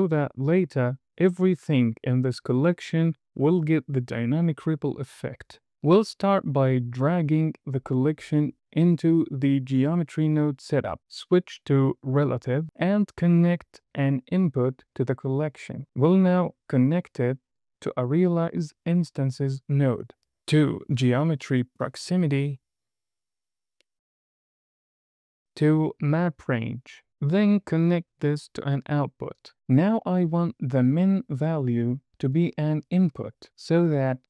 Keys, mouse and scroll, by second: 6.0 click, 7.7 click, 7.9 click, 11.0 click, 11.4-11.8 scroll up 2, 11.8 middle click, 13.1 drag, 17.1 drag, 20.3 drag, 23.9 click, 27.4 drag, 29.0 middle click, 29.0 scroll down 1, 31.3 drag.